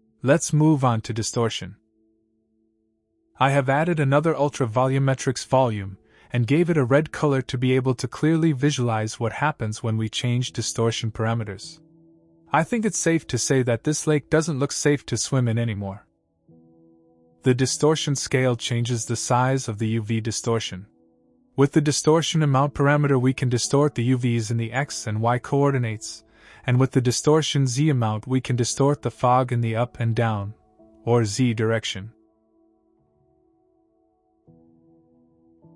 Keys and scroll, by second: 2.9 Return.